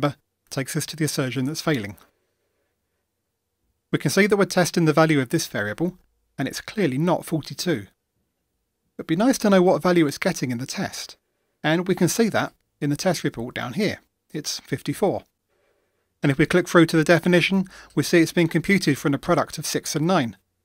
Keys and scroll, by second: 18.2 super+b.